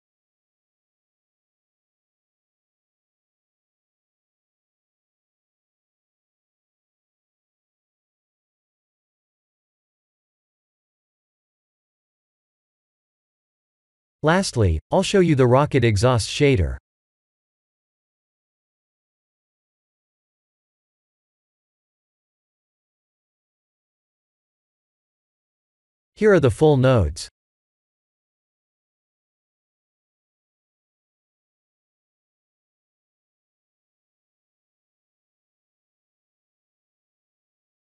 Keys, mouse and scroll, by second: 6.0 click, 6.8 click, 8.5 click, 13.4 r, 16.5 ctrl+z, 17.1-17.6 scroll down 3, 17.6 b, 19.3 click, 21.0 click, 24.3 click, 24.8 ctrl+space, 25.5-27.5 scroll down 7.